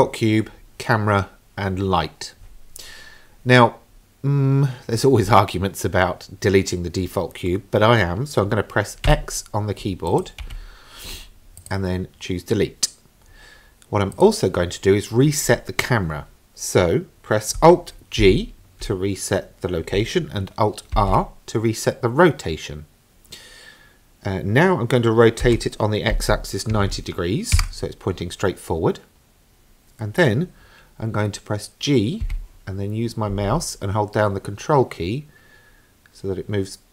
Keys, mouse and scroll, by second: 10.1 click, 10.6 x, 14.1 click, 18.2 alt+g, 21.0 alt+r, 25.4 r, 32.2 g.